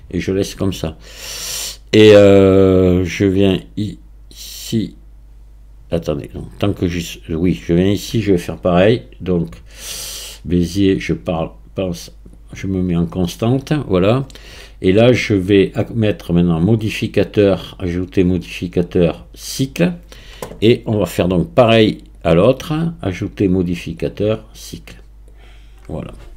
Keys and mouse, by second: 3.7 click, 6.7 click, 7.7 click, 11.1-13.6 drag, 17.0 click, 18.4-19.7 drag, 22.2 click, 24.2-25.5 drag.